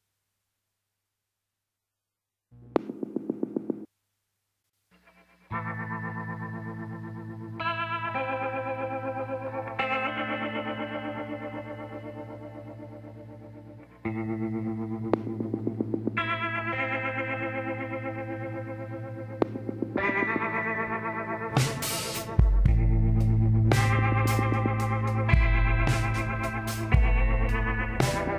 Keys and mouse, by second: 0.9-4.8 middle drag, 6.0-7.5 middle drag, 7.5 KP_1, 8.1 middle click, 8.6-9.7 drag, 11.0 click, 17.1-19.0 drag, 18.3 shift+s, 20.5 shift+a, 25.0 middle click, 26.4 t, 27.4-28.3 drag.